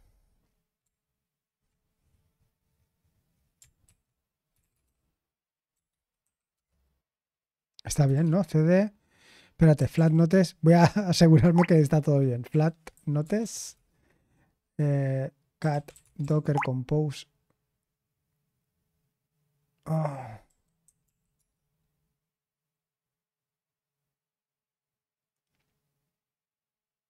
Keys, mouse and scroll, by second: 3.8 super+7, 4.5 c, 8.2 ctrl+c, 9.7-10.5 typing, 12.0-14.2 typing, 13.2 Return, 15.3-16.9 typing, 20.5-21.8 typing.